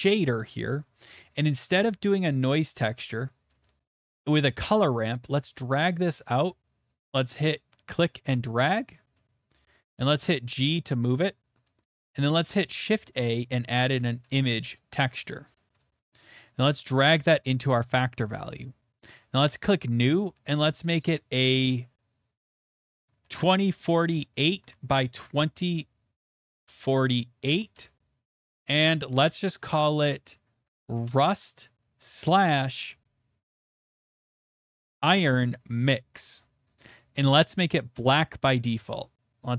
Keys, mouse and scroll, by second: 0.0 middle click, 0.4 middle click, 0.8 click, 1.2 middle click, 1.7 middle click, 3.9 click, 5.7 click, 6.4 click, 8.3 click, 9.2 click, 9.8 g, 11.0 click, 12.2 click, 12.6 shift+a, 13.2 click, 13.9-14.2 typing, 14.6 Return, 15.8 click, 17.8 click, 19.6 typing, 19.8 click, 20.8 click, 21.2 click, 21.8 click, 23.2-26.7 typing, 24.9 Tab, 27.7 Return, 31.5 Return, 31.5 click, 31.5-32.0 typing, 34.1-36.1 typing, 37.9 Return.